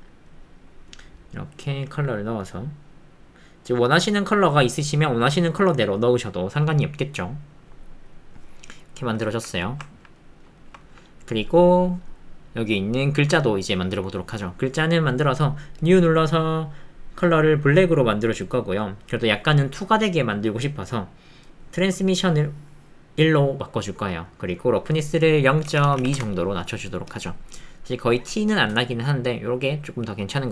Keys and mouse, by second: 9.3 ctrl+middle click, 9.6 shift+middle click, 9.9 ctrl+middle click, 10.2 middle click, 10.6 ctrl+shift+click, 10.8 ctrl+click, 16.5 click, 20.6 click, 21.0 middle click, 22.1-23.3 drag, 23.9 middle click, 24.9-26.2 drag, 30.0 middle click.